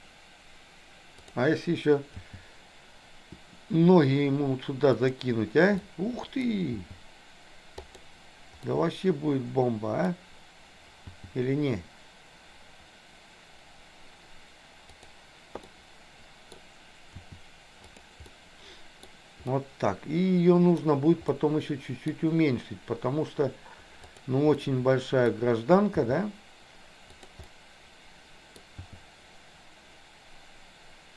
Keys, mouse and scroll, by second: 2.2 g, 5.8 middle click, 6.8 g, 8.8-10.1 middle drag, 11.2 g, 15.6 middle click, 16.5 scroll down 1, 17.1 r, 18.3 scroll up 1, 18.4 middle click, 19.5-20.8 middle drag, 21.3 middle click, 24.0 click, 24.5 middle click, 26.0 g, 27.4-28.6 middle drag, 28.8 g.